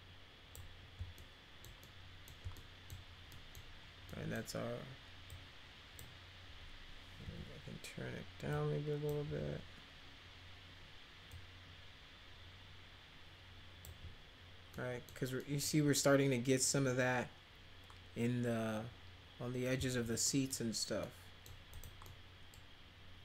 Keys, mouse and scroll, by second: 1.2 alt+middle click, 1.8-2.3 middle drag, 2.5 alt+middle click, 3.3 middle click, 4.1 middle click, 5.3 click, 7.2 e, 8.5 click, 9.2 w, 11.3-13.8 drag, 14.7 middle click, 15.4 middle click, 20.3 middle click, 21.0 middle click, 21.7 click, 22.0 middle click.